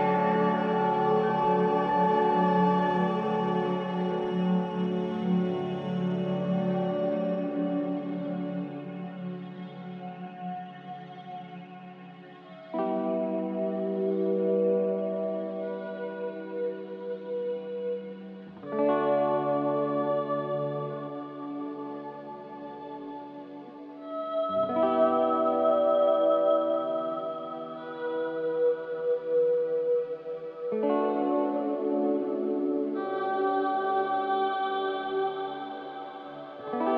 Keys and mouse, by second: 3.6-3.9 shift+middle drag, 5.0-5.4 shift+middle drag, 6.0 Tab, 6.9 Tab, 7.2 Tab, 8.5 F4, 8.6 F4, 9.2 F4, 10.1 Tab, 10.6 Tab, 10.9-12.2 right drag, 12.4 Tab, 12.8 Tab, 13.9 Tab, 15.7 click, 16.3 click, 17.1 Tab, 18.6-19.4 shift+middle drag, 22.1 click, 23.3 shift+click, 24.6 shift+click, 26.5-27.2 middle drag, 34.9-35.5 shift+middle drag.